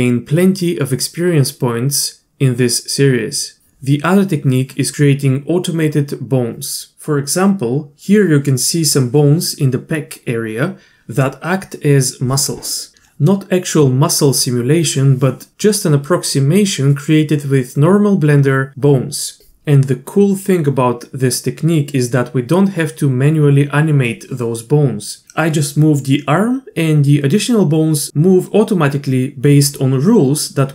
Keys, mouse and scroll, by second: 0.5 z, 1.1 z, 1.7 z.